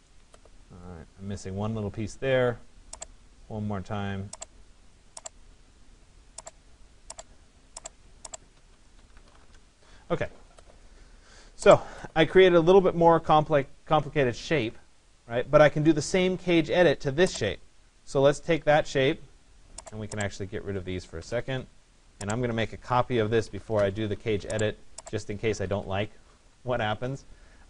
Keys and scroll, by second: 9.0 Return, 20.8 Delete, 23.7 Return.